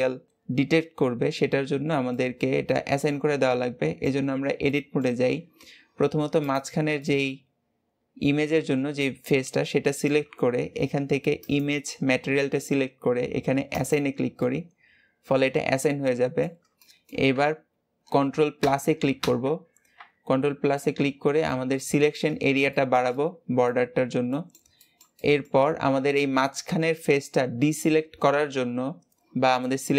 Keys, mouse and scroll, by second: 2.1-4.2 middle drag, 4.2 Tab, 4.7 middle click, 5.3-6.1 scroll up 1, 6.1-6.4 scroll up 1, 6.4 click, 6.9-10.0 middle drag, 11.4 click, 13.7 click, 14.4-18.6 middle drag, 18.6 ctrl+KP_Add, 19.2 ctrl+KP_Add, 20.7-22.3 middle drag, 22.3-22.7 scroll up 2, 22.7-23.9 shift+middle drag, 23.9-24.3 scroll down 3, 24.3-28.2 middle drag, 29.5-29.9 middle drag.